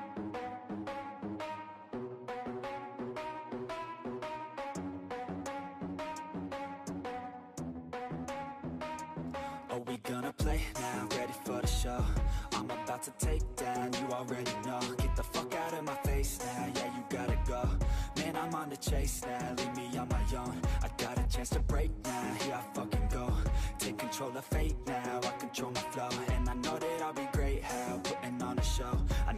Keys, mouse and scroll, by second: 0.1-3.8 drag, 3.8 ctrl+z, 4.0 ctrl+z, 4.2 ctrl+z, 4.5 ctrl+z, 5.1-6.2 ctrl+drag, 6.2 ctrl+z, 6.4 ctrl+z, 6.6 ctrl+z, 7.1 ctrl+z, 7.6-9.8 drag, 12.9 click, 13.2 ctrl+z, 13.8-14.8 ctrl+drag, 16.3-19.8 ctrl+drag, 19.8 ctrl+z, 20.0 shift+middle click, 20.2-20.9 scroll down 2, 20.9 ctrl+click, 22.5-25.3 ctrl+drag, 25.3 ctrl+z, 25.6-28.7 ctrl+drag, 28.7-29.3 shift+middle drag.